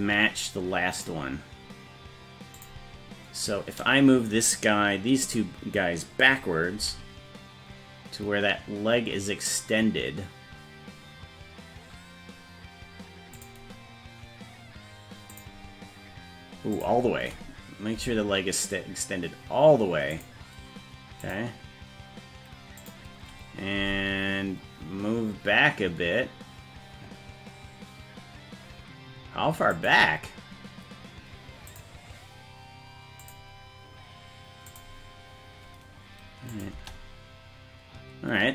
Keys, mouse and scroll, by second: 0.9 click, 2.5 click, 6.8 g, 15.3 click, 16.7 click, 17.9 g, 21.2 click, 22.8 click, 23.8 g, 31.7 click, 33.2 click, 34.6 click, 36.5 click, 36.7 space.